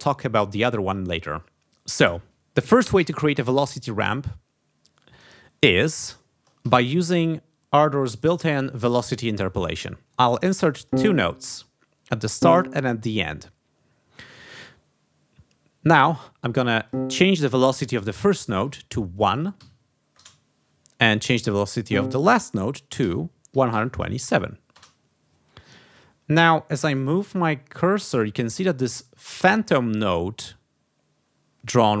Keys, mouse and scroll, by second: 3.0 g, 4.2 ctrl+scroll down 2, 5.2 ctrl+scroll up 2, 5.6 ctrl+scroll down 2, 5.9 ctrl+scroll up 2, 6.6 ctrl+d, 6.9 ctrl+click, 12.3 click, 16.8 click, 18.1 v, 19.6 1, 20.1 Return, 21.9 click, 22.8-24.3 typing, 24.7 Return.